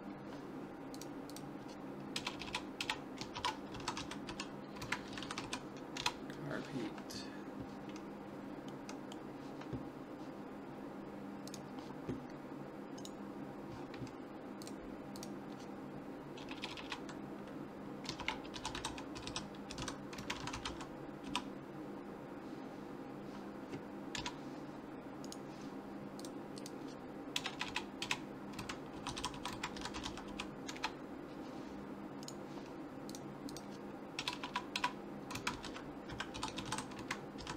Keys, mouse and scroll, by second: 1.0-2.7 drag, 2.3 BackSpace, 2.5 BackSpace, 8.7-10.6 middle drag, 11.5 click, 13.0-14.9 right drag, 14.6 click, 16.6 BackSpace, 16.7 BackSpace, 19.3 t, 25.3-27.0 right drag, 26.2 click, 27.5 BackSpace, 27.7 BackSpace, 28.0 click, 32.3-34.1 right drag, 33.1-34.9 drag, 34.4 BackSpace, 34.5 BackSpace.